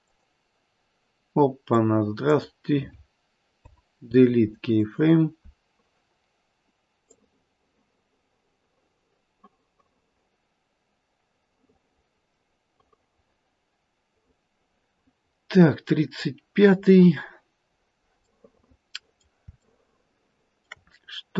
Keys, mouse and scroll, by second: 0.0 click, 3.5 Delete, 7.1 click, 18.3 middle click, 19.6 shift+middle click, 20.9-21.3 scroll up 3.